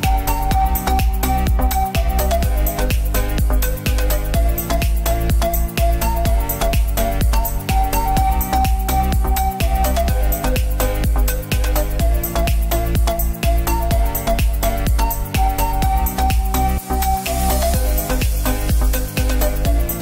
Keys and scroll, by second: 2.4 x, 15.9 space.